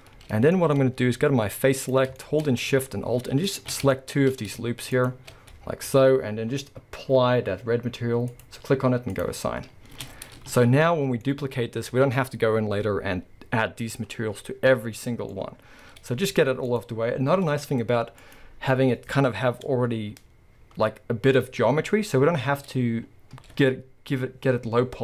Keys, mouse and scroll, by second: 0.5-1.8 shift+middle drag, 1.8 click, 2.2-3.5 shift+middle drag, 2.4-3.2 scroll up 2, 3.2 scroll up 1, 3.5 alt+shift+click, 3.9-4.9 shift+middle drag, 4.9 alt+shift+click, 5.6-6.5 scroll down 2, 6.5-8.3 scroll up 2, 8.3 click, 9.1 click, 10.0 Tab, 10.1-10.5 scroll down 1, 10.5 alt+a, 10.9-16.7 middle drag, 11.9-13.9 scroll up 2, 13.9-15.3 scroll up 1, 16.4 scroll up 2, 16.7 click, 18.2 click, 19.9 Tab.